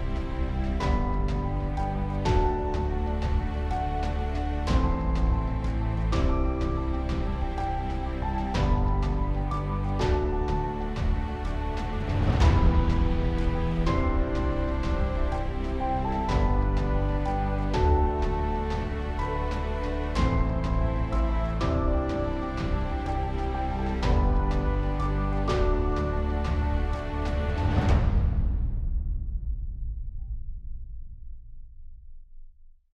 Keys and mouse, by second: 9.4 middle click, 17.3 KP_Decimal, 17.9 Return, 18.6 middle click, 19.3 middle click, 22.6 KP_Decimal, 22.9 Return, 26.6 KP_Decimal, 26.9 Return, 28.7 ctrl+z, 29.4 KP_0, 29.5 Return, 30.4 alt+middle click.